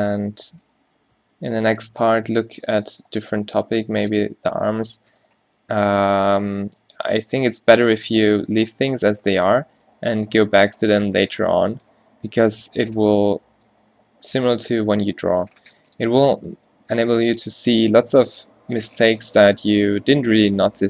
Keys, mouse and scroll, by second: 2.2 ctrl+z, 3.4 g, 6.0 g, 7.1 g, 8.5 Tab, 11.2 a, 11.8 a, 14.5 Tab, 14.9 g, 16.1 Tab, 16.9 a, 17.3 a, 20.7 Tab.